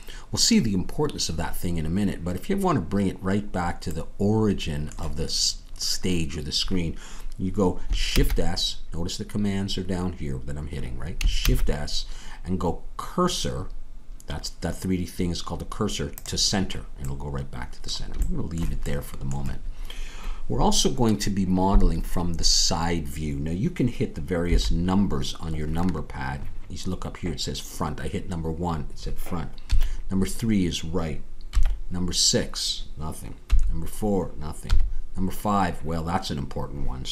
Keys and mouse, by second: 8.1 shift+s, 11.4 shift+s, 24.5 KP_1, 29.6 KP_3, 31.5 KP_6, 33.5 KP_4.